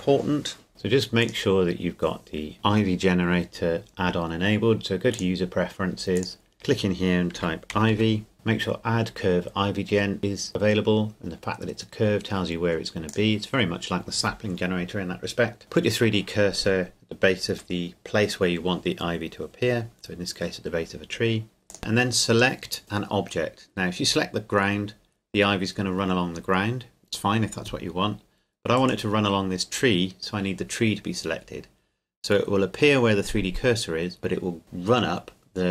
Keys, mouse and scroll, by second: 0.7 click, 5.1 click, 7.4-8.0 typing, 15.3 click, 21.7 click, 28.7 right click.